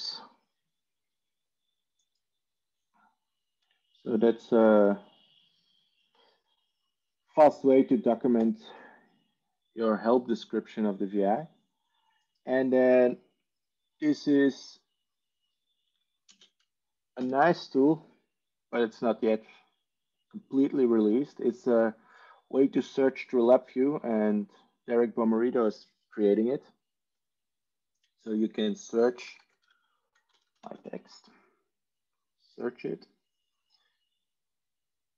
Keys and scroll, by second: 16.7 ctrl+space, 17.2 ctrl+8, 29.1-31.2 typing.